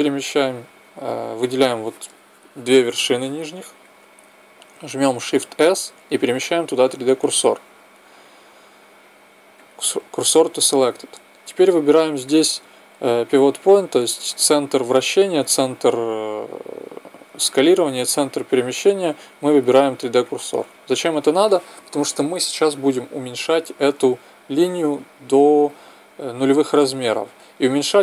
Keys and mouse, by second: 5.4 shift+s, 12.2-14.2 drag.